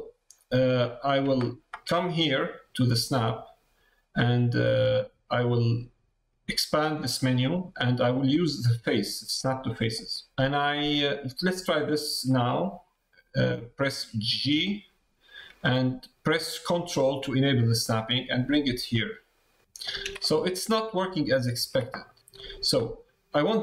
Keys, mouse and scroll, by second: 0.3 middle click, 0.8 shift+middle click, 5.5-11.5 drag, 20.2 middle click, 21.7 ctrl+z, 22.0 middle click.